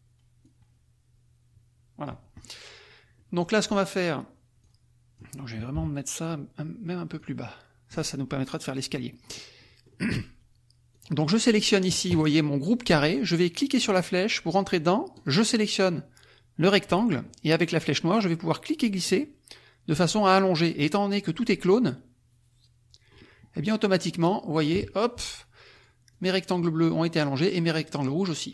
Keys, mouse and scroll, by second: 0.5-2.2 drag, 2.4 click, 3.1 middle click, 3.6 middle click, 4.6 click, 5.7 KP_Subtract, 7.1 click, 9.0 middle click, 9.6 middle click, 11.0 click, 13.8 click, 15.1 click, 19.0-20.8 drag, 24.0 middle click, 24.7 KP_Subtract, 25.9 click, 26.1 click.